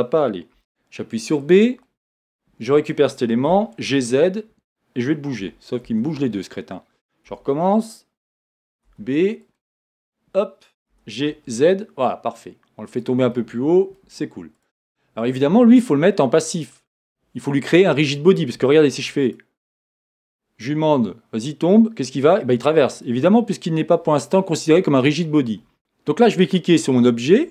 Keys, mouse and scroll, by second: 0.6 b, 3.5 g, 5.9 Escape, 7.3 a, 8.8 b, 10.9 g, 13.0 click, 13.3 middle click, 14.5 click, 16.7-18.1 scroll down 1, 19.2-23.1 drag, 23.8-25.1 drag.